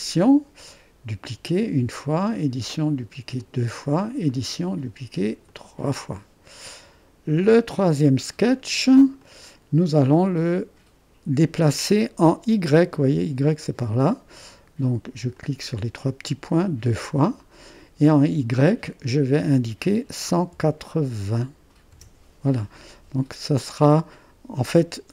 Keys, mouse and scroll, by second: 0.2 click, 1.7 click, 3.6 click, 4.5-5.5 drag, 15.4-17.5 drag, 18.6-20.2 drag, 20.2 1, 20.5 8, 21.9 0, 25.0 typing.